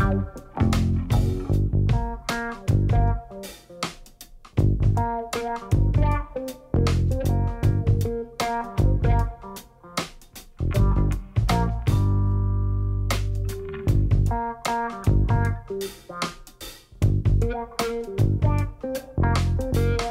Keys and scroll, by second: 1.9 space, 2.7 Tab, 4.6 Tab, 4.9 space, 12.8 space.